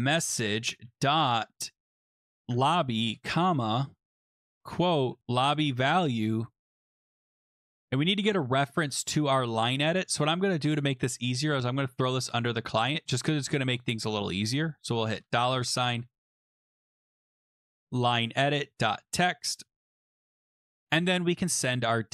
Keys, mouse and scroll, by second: 0.0-0.8 typing, 1.8-7.8 typing, 9.3 BackSpace, 10.1 click, 11.2 click, 12.1 click, 13.6 click, 15.1-19.9 typing, 19.9 Escape, 20.4 Down, 20.6 Return.